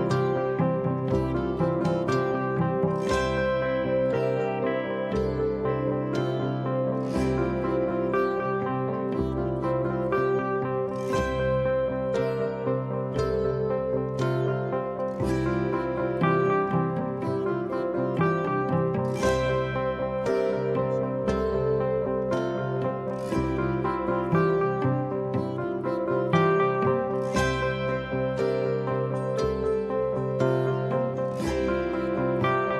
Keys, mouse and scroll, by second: 0.5-2.5 middle drag, 2.7-3.6 scroll up 1, 3.6 middle click, 5.8-8.0 drag, 13.1 click, 17.0-18.0 scroll up 2, 18.0 right click, 23.9 click, 25.8 click, 27.6-30.0 drag.